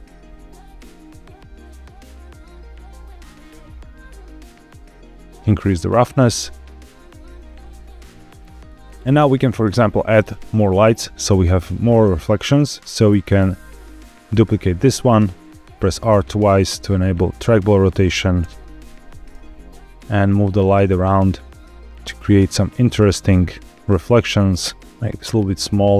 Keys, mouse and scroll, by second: 5.4-6.8 drag, 7.9-8.2 scroll down 1, 8.6 scroll up 1, 8.8-9.3 scroll down 1, 10.0 middle click, 10.4 scroll down 2, 11.7 click, 12.5 middle click, 12.9 scroll down 1, 13.2 shift+d, 14.6 click, 14.8 r, 15.0 r, 17.7 click, 18.3 KP_0, 19.2 g, 21.1 click, 21.5 scroll down 3, 22.1 scroll down 1, 22.4 middle click, 22.8-23.1 scroll down 1, 24.0 click, 25.4 g.